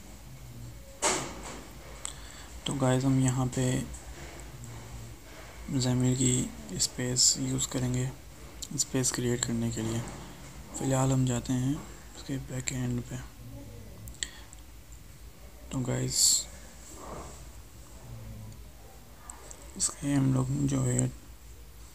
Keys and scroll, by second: 2.5 ctrl+shift+Left, 18.2 ctrl+BackSpace.